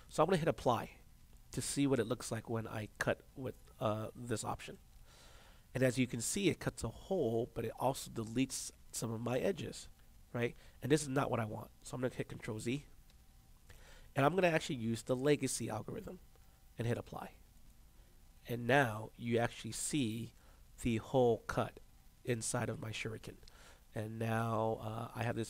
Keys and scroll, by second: 13.0 ctrl+z.